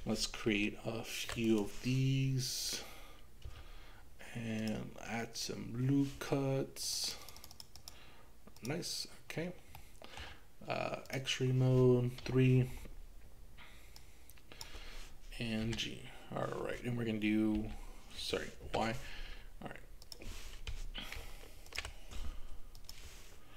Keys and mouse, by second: 0.5 ctrl+r, 3.5 Escape, 4.8 ctrl+r, 4.8 Escape, 6.8 click, 7.1 click, 7.4 click, 7.9 click, 9.8 middle click, 11.1 click, 12.2 KP_3, 14.0 click, 15.7 g, 17.6 x, 18.7 y, 20.1 click, 21.2 ctrl+r, 21.7 ctrl+r, 21.9 ctrl+r, 22.8 click.